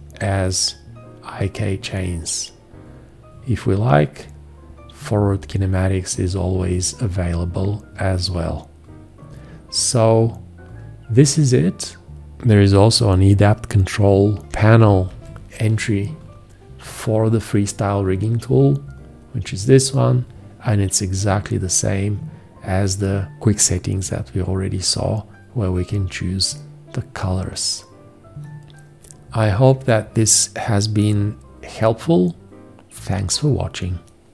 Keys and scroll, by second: 15.1 alt+0.